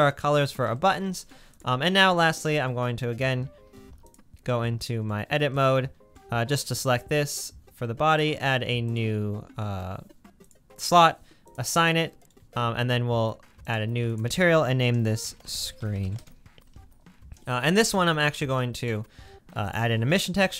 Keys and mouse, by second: 2.1 Tab, 3.8 3, 4.2-5.4 drag, 5.4 middle click, 6.2 click, 6.2-6.6 typing, 6.5 middle click, 6.6-7.0 drag, 12.4 Tab, 12.4-13.6 middle drag, 16.0 e, 18.1 middle click, 18.5 click, 19.9 shift+a.